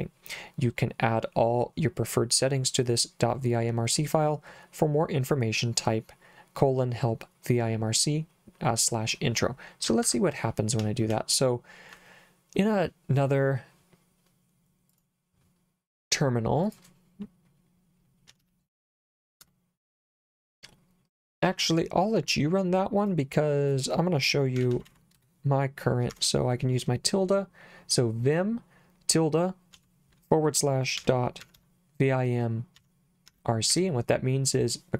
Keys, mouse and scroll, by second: 9.9 Escape, 10.8 j, 11.1 k, 14.9 click, 16.7 click, 17.1-19.6 typing, 21.1 click, 23.0 click, 23.7 click, 24.3-26.1 typing, 29.7-34.2 typing.